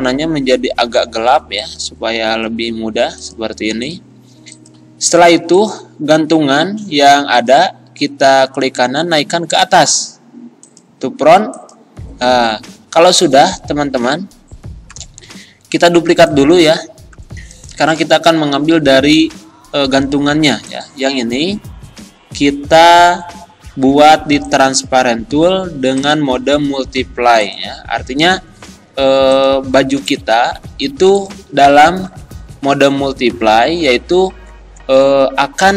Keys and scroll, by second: 32.1 Right, 33.3 Left.